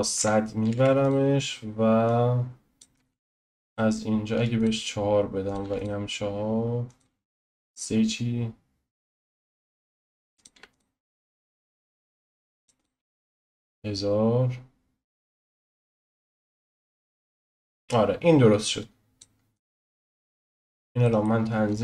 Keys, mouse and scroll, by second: 0.1 click, 1.0 0, 2.2 click, 3.0 ctrl+z, 4.6-11.4 drag, 12.8 click, 15.3-19.9 drag, 19.9-20.5 scroll down 2, 20.5-21.8 scroll up 3, 21.0 middle click.